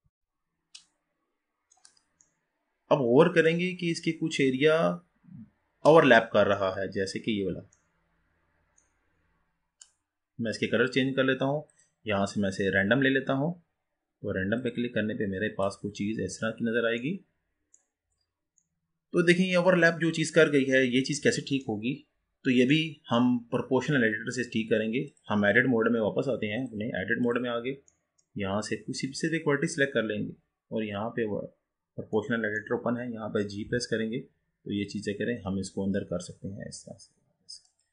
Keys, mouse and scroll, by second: 9.3-10.0 scroll down 3, 10.2-11.8 scroll up 2, 11.8-15.0 drag, 15.7 click, 16.1-16.6 scroll down 2, 16.6-17.0 scroll up 3, 17.0-18.0 middle drag, 18.0-18.8 scroll up 3, 18.8-22.0 middle drag, 22.0-22.8 scroll up 4, 22.8-25.1 middle drag, 25.1 click, 26.7-28.0 drag, 28.0-29.3 middle drag, 29.3 click, 32.4-33.8 middle drag, 33.8 g.